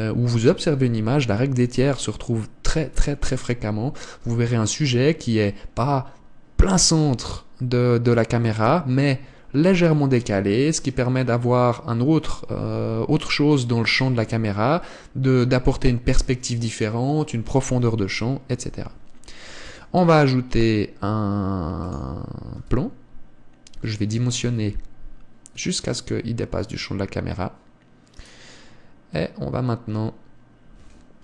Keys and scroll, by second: 20.1 shift+a.